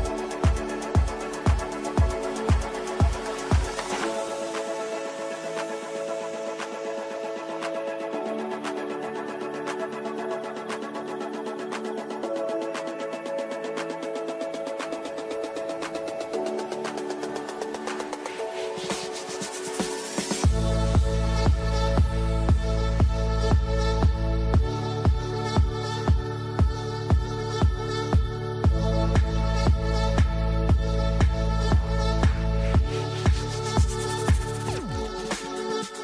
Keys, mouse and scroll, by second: 1.5-13.6 drag, 13.9 typing, 14.6 shift+click, 16.4-18.2 shift+drag, 19.2 click, 19.9-22.7 ctrl+drag, 23.7 right click, 25.3 click, 29.2-35.1 drag, 35.1 right click.